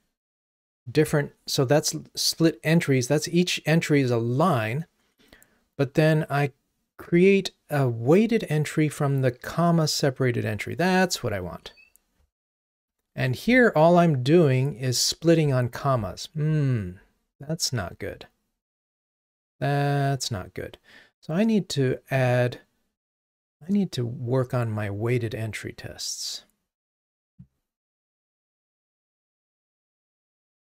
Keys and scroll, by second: 11.5 super+b.